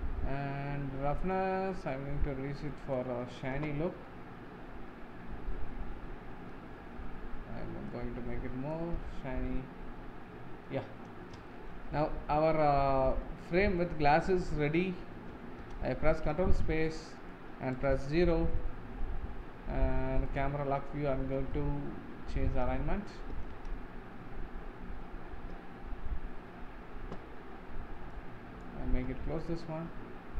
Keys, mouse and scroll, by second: 1.5-4.2 drag, 4.2-8.2 middle drag, 8.2-9.5 drag, 9.5-10.9 middle drag, 10.9 scroll down 4, 11.5-12.7 shift+middle drag, 12.7-13.1 scroll up 4, 13.3-13.8 shift+middle drag, 13.8-14.2 scroll down 2, 14.2-15.7 middle drag, 15.7 ctrl+space, 16.2-16.8 scroll down 7, 17.2 middle click, 17.9 KP_0, 20.3 click, 20.8-21.5 scroll down 4, 21.7-22.4 shift+middle drag, 23.6 ctrl+space, 24.9-25.3 scroll down 4, 25.6-26.2 scroll up 3, 28.3-29.9 drag, 29.9-30.3 scroll down 8.